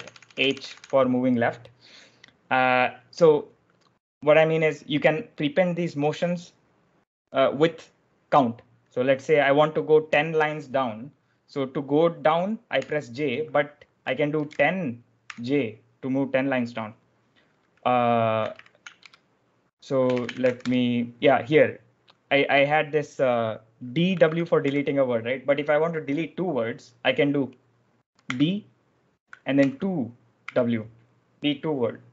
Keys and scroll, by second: 0.0-1.2 typing, 12.7 j, 14.0-15.2 typing, 19.0-20.8 typing, 23.8-25.0 typing, 28.2 d, 29.5 2, 30.3 w.